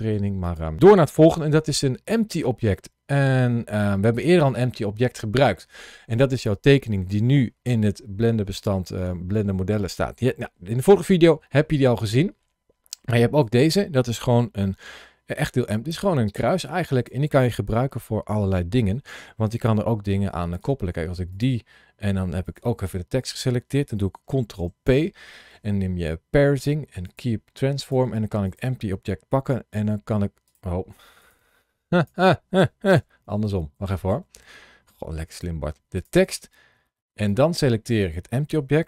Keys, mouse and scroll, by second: 0.3 click, 1.2 shift+a, 14.7 s, 16.8 click, 18.1-19.5 scroll down 2, 19.7 shift+middle click, 20.4 click, 21.2 click, 22.3 shift+click, 24.4 ctrl+p, 27.7 click, 28.3 click, 29.3 g, 30.3 right click, 31.1 click, 31.3 g, 31.8 click, 33.0 ctrl+z, 33.3 ctrl+z, 35.8 click, 37.1 shift+click.